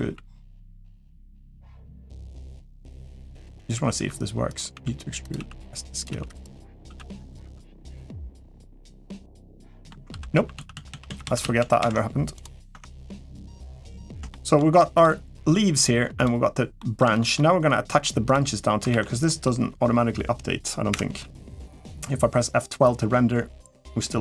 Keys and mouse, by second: 2.6 g, 3.7-6.6 typing, 7.2 Tab, 7.9-8.8 middle drag, 9.4 shift+middle click, 9.9 ctrl+z, 10.1 ctrl+z, 10.3 ctrl+z, 10.5 ctrl+z, 10.7 ctrl+z, 10.8 ctrl+z, 11.0 ctrl+z, 11.2 ctrl+z, 11.4 ctrl+z, 11.6 ctrl+z, 12.7 Tab, 12.7 middle drag, 13.3 middle click, 14.1 shift+middle click, 14.8 click, 15.9 click, 16.6 middle click, 17.0 shift+middle drag, 18.0 click, 18.7 ctrl+s, 19.0 middle click.